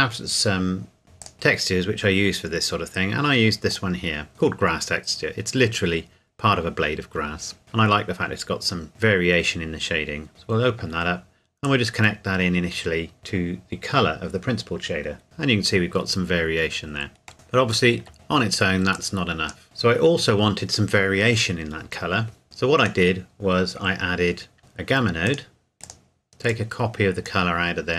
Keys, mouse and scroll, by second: 1.2 click, 1.8 scroll down 1, 3.7 click, 10.3-15.2 drag, 15.2-17.3 scroll up 2, 17.5 shift+middle click, 18.1-18.9 scroll down 2, 18.9 click, 19.6 shift+middle click, 22.4 click, 26.8 click, 27.6-27.9 scroll up 1.